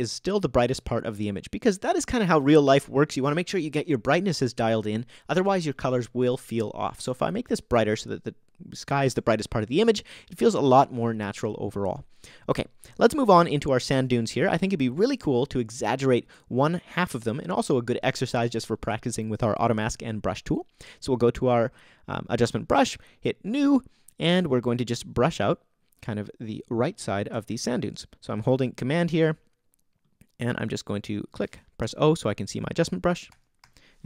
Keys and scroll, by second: 13.9 Return, 31.8 super+o, 32.6 o, 33.3 o.